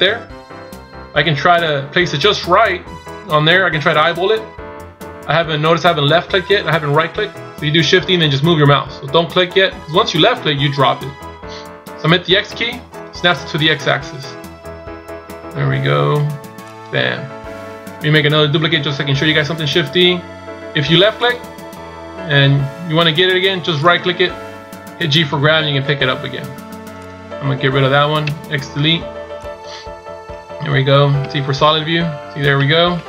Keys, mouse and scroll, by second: 19.7 shift+d, 23.9 right click, 25.3 g, 28.2 x, 31.2 z, 32.9 z.